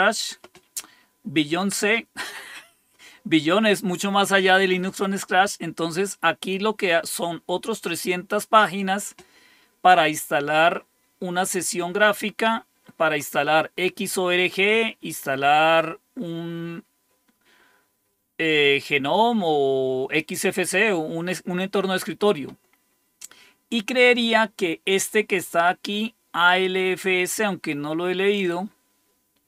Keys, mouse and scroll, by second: 11.3 click, 13.8-14.7 scroll down 2, 25.4 click.